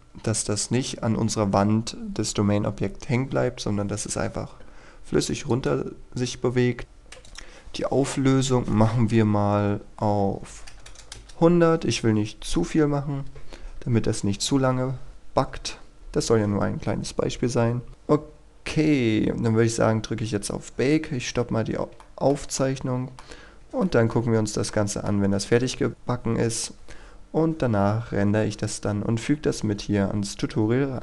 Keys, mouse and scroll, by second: 6.8-7.3 scroll up 1, 7.3-8.4 drag, 10.5 KP_1, 10.8 KP_0, 11.2 Return, 16.3-17.9 scroll up 1, 17.9 click, 19.1-22.0 scroll up 1, 22.1 shift+middle click, 23.4 scroll up 1, 23.9 shift+middle click, 24.7 middle click.